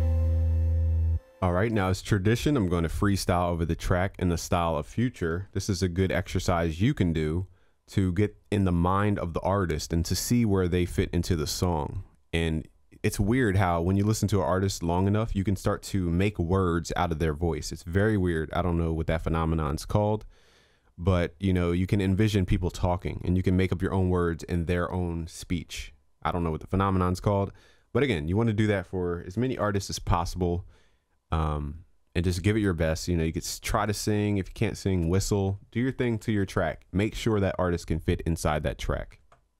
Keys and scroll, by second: 5.6 ctrl+s, 29.7 ctrl+s.